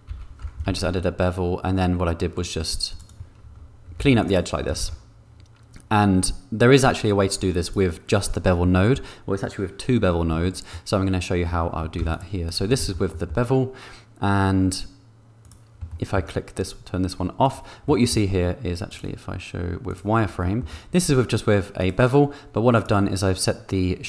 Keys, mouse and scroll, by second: 0.3 a, 0.9 ctrl+b, 4.1 ctrl+r, 5.0 ctrl+b, 10.6 Tab, 10.7 middle click, 11.9 x, 12.4 click, 12.7 shift+middle click, 13.1 middle click, 15.4 click, 15.9 shift+click, 17.5 click, 17.8 middle click, 18.8-20.2 drag, 20.4 shift+click.